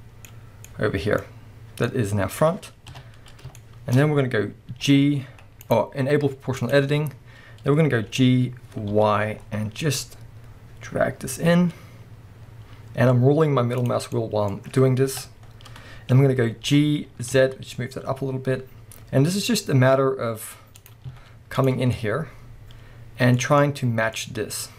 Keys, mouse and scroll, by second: 2.9 KP_3, 3.6 shift+middle click, 5.7 right click, 6.6 click, 7.4 scroll up 1, 13.9 click, 14.0 scroll down 2, 14.1-16.7 middle drag, 15.1 KP_3, 15.9-16.7 scroll up 2, 20.9 click, 21.9 scroll down 2, 22.0-24.2 middle drag, 24.2 scroll up 2, 24.5 middle click.